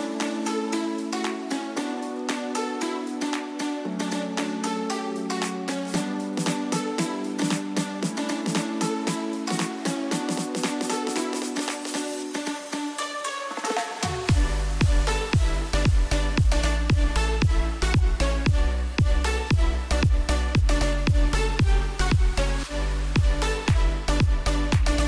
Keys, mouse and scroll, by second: 4.5 click, 7.2 ctrl+d, 19.8 click.